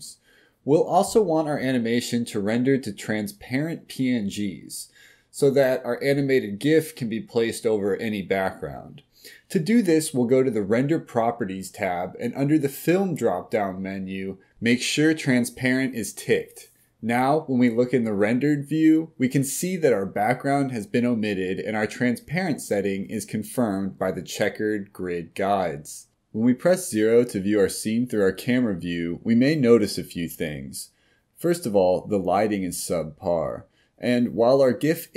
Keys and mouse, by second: 2.5 click, 6.8 click, 9.5 click, 11.5 click, 13.6-19.1 middle drag, 20.7 click, 21.7-22.4 middle drag, 23.0 KP_0.